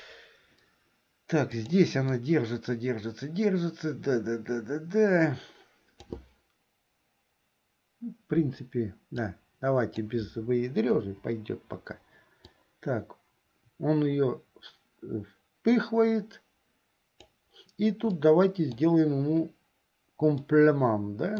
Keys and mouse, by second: 1.7 click, 2.4-6.3 drag, 9.4 click, 11.2 Delete, 12.7-17.5 drag, 18.3 middle click, 20.5-21.3 middle drag.